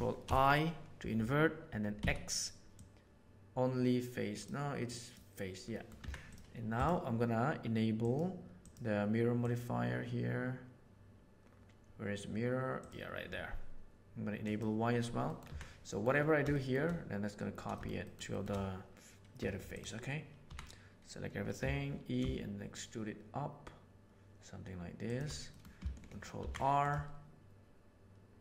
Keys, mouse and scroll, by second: 0.2 ctrl+i, 1.9 x, 5.7 middle click, 6.0 Tab, 8.6 click, 9.3-12.9 drag, 14.4 click, 15.3 middle click, 15.4 Tab, 16.5 shift+middle click, 17.7 shift+middle click, 18.0 shift+middle click, 18.3 shift+middle click, 19.4 2, 20.3 a, 21.5 e, 25.5 middle click, 26.3 ctrl+r.